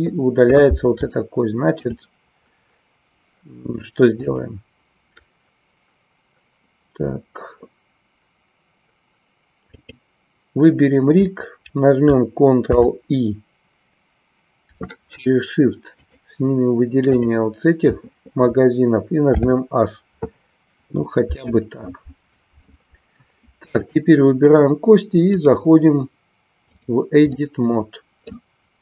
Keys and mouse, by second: 1.1 shift+middle click, 4.4 click, 9.7 click, 12.7 ctrl+i, 17.1 shift+click, 23.7 click, 25.5-27.0 drag, 27.2-28.3 middle drag.